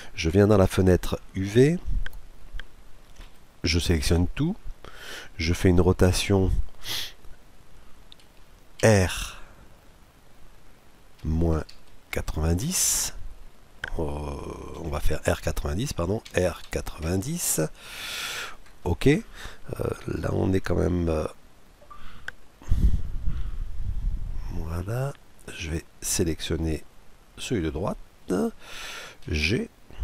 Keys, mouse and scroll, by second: 3.2 a, 4.1 a, 8.8 r, 16.3 r, 25.6-29.3 right drag, 29.3 g.